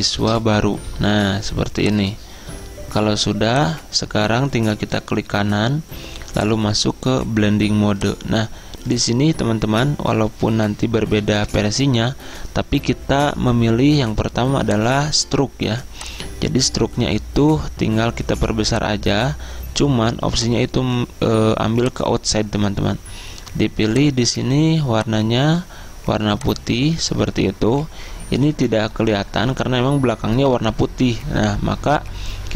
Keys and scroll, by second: 0.0-0.6 typing.